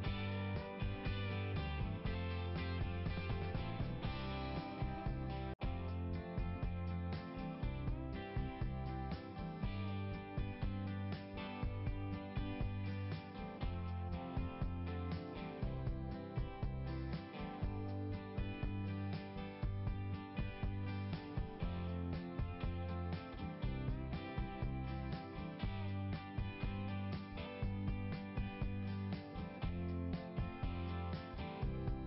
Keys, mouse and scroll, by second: 0.7-1.1 scroll up 1, 5.9 click, 6.0 click, 7.1 click, 7.2 click, 8.4 right click, 8.4 right click, 8.5 right click, 8.6 right click, 10.2 click, 10.3 click, 11.2 click, 12.8 click, 12.9 click, 15.8-17.0 scroll up 1, 17.5 click, 23.8 scroll down 1, 25.4 scroll down 1, 27.1 click, 30.2 click, 30.4 click.